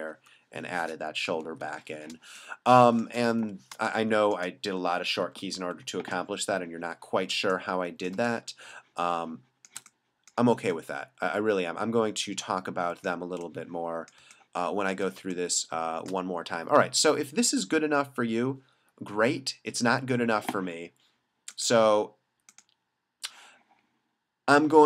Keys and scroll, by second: 1.5 super+d, 2.2 space, 3.5 b, 3.8 space, 5.0 ], 7.4 space, 9.9 space, 14.3 space, 15.4 space.